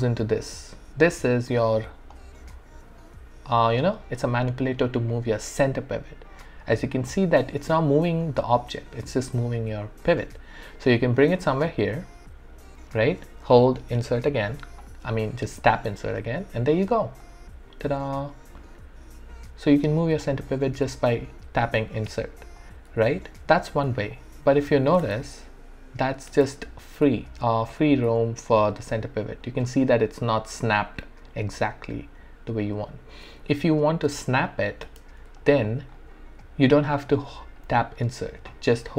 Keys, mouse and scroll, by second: 2.1-11.9 drag, 11.9-16.4 alt+drag, 16.4 e, 17.2-20.9 drag, 20.9 ctrl+z, 21.9 alt+click, 22.9 w, 24.1 alt+click, 25.0 space, 26.9 scroll down 1, 27.3 alt+middle click, 27.6-28.1 alt+scroll up 2, 28.3 alt+middle click, 29.6 scroll up 1, 32.7 scroll down 1, 34.1 space, 35.1 space, 35.4 alt+click, 36.4 alt+right click, 36.9 alt+click, 37.6 alt+middle click.